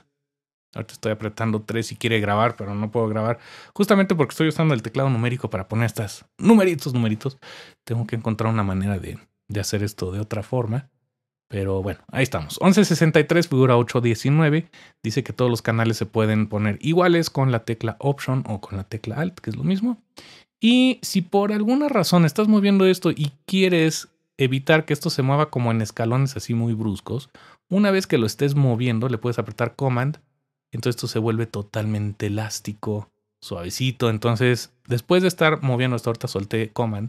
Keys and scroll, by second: 2.9 typing.